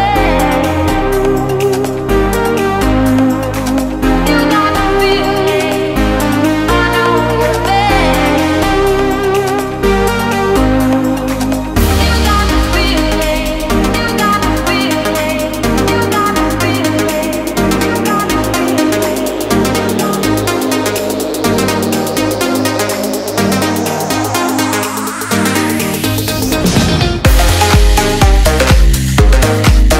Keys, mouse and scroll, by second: 3.7-4.9 click, 11.5 Return, 17.4 0, 22.3 ctrl+s, 25.4 click.